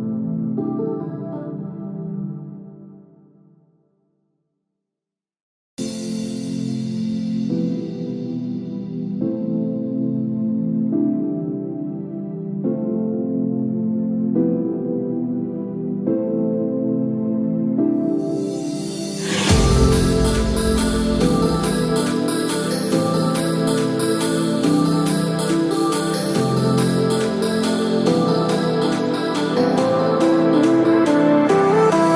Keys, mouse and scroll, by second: 0.2 click, 21.9 shift+middle click, 26.4 click.